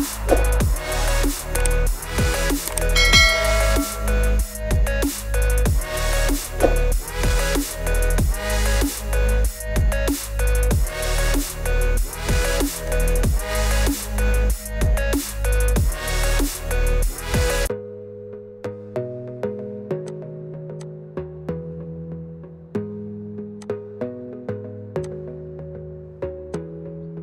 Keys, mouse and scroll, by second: 0.0 click, 1.7 shift+click, 2.7 click, 3.2 middle click, 3.3 scroll up 7, 3.5 scroll, 5.0 click, 10.2 click, 12.4 click, 12.9 click, 13.8-14.2 scroll, 17.0 scroll, 17.1 click, 19.3 ctrl+r, 20.1 click, 20.9 click, 22.8 ctrl+r, 23.7 click, 25.0 click, 25.6 middle click, 26.6 click.